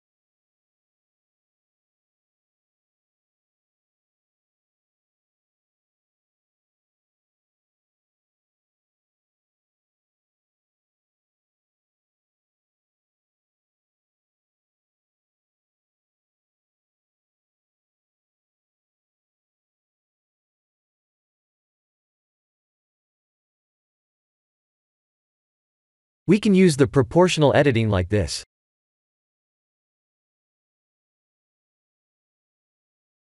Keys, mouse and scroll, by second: 0.9 shift+click, 1.7 shift+click, 3.2 ctrl+j, 5.4 ctrl+z, 6.6 click, 7.3 click, 8.2 click, 9.0 shift+click, 9.9 shift+click, 10.8 ctrl+j, 12.1 click, 12.9 s, 13.9 g, 15.0 r, 16.3 g, 17.0 s, 18.7 r, 19.6 g, 20.6-21.2 scroll up 5, 21.2 shift+middle click, 22.4 click, 22.7 Tab, 23.1 scroll up 2, 24.9 3, 25.5 alt+click, 26.4 alt+click, 28.8 click, 29.3 g, 32.5 Tab, 33.1 scroll down 4.